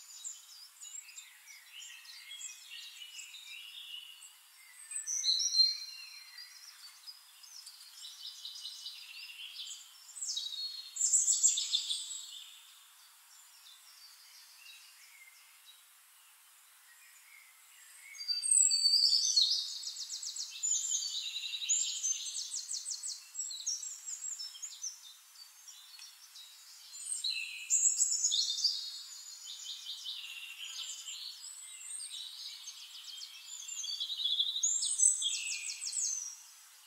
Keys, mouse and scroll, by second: 0.4 click, 1.5 click, 3.8 ctrl+shift+click, 4.7 ctrl+shift+d, 5.1 ctrl+shift+click, 7.0 click, 7.7 click, 8.9 click, 10.7 click, 11.4 ctrl+shift+click, 12.6 ctrl+shift+drag, 13.4 ctrl+shift+click, 14.6 ctrl+shift+click, 15.3-16.3 ctrl+shift+drag, 16.5 ctrl+shift+click, 17.7 ctrl+d, 19.3 click, 20.8 shift+click, 21.9 click, 23.0 click, 24.4 click, 28.0 click, 28.7 shift+click, 29.1 shift+click, 29.7 shift+click, 30.3-32.2 shift+right drag, 33.5 click, 34.4 click, 36.3 middle click.